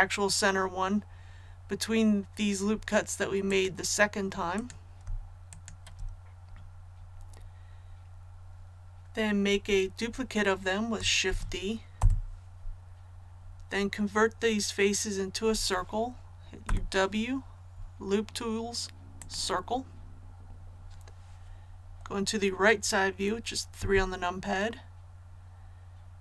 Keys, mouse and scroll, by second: 3.4 click, 4.5 right click, 5.5 shift+right click, 11.2 shift+d, 11.9 Return, 16.6 w, 19.1 click, 23.7 KP_3.